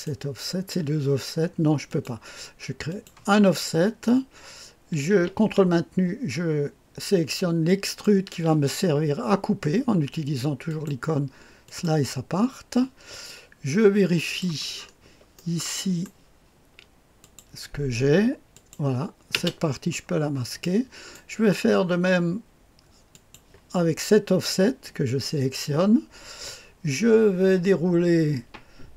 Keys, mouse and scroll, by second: 1.8 click, 2.8 click, 7.7 ctrl+click, 10.6 click, 11.6 click, 13.2-14.4 drag, 14.7-15.3 scroll up 2, 15.3-17.3 drag, 18.5 click, 19.3 space, 20.0-20.6 scroll down 1, 20.6 click, 21.2 middle click, 23.0 click.